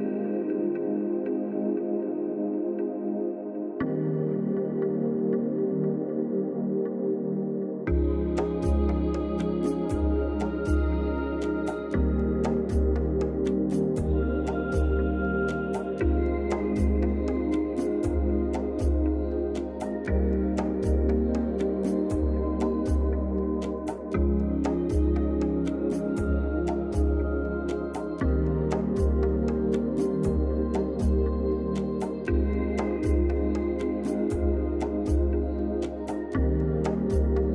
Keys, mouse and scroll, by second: 1.8 shift+F5, 3.9 click, 10.1 click, 12.0 click, 12.3 right click, 12.8 click, 14.8-16.3 typing, 17.1-19.3 drag, 20.1 z, 20.6-22.4 drag, 26.1 right click, 26.8 click, 28.5-29.4 typing, 30.1-33.4 drag.